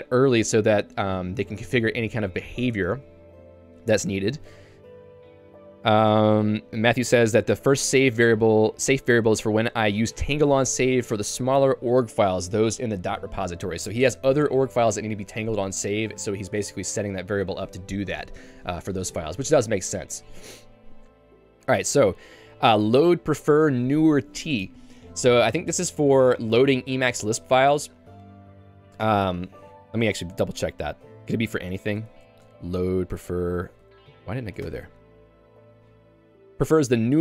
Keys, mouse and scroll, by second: 0.3 k, 0.6 l, 3.5 j, 3.9 k, 22.4 l, 22.8 shift+v, 32.0 Escape, 34.7 Return, 35.5 j.